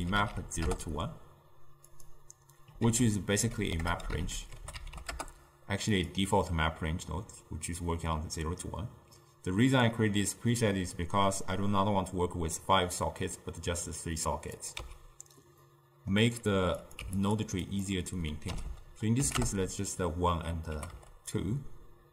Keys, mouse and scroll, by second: 2.9 ctrl+a, 10.0 click, 14.7 click, 14.9 x, 15.7-16.9 middle drag, 16.9 click, 17.7-20.8 drag, 20.8 g.